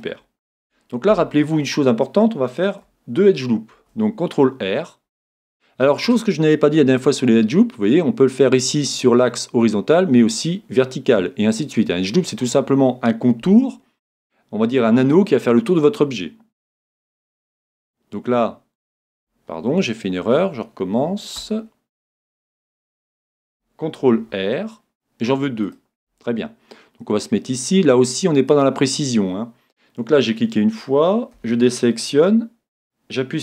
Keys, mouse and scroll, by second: 0.6 Tab, 3.7 ctrl+r, 22.6 super+z, 24.2 ctrl+r, 28.6-30.5 drag, 31.3 a, 32.3 a.